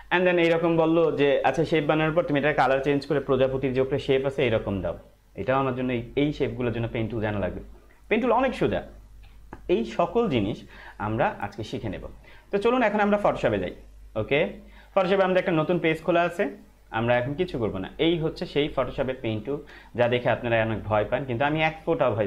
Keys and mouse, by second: 10.2 click, 10.8 Right, 12.6 click.